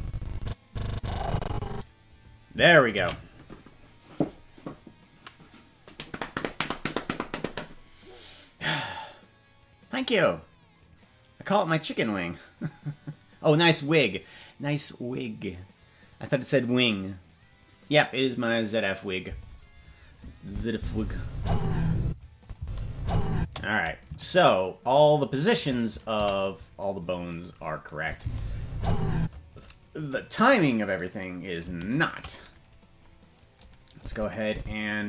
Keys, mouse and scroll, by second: 5.2 ctrl+s, 20.4 click, 20.7 space, 22.0 space, 22.4 click, 22.5 space, 23.3 space, 24.2 shift+right click, 26.2 a, 27.3 right click, 28.0 click, 28.1 space, 29.1 space, 30.0-31.9 right drag, 34.0 click, 34.4 click.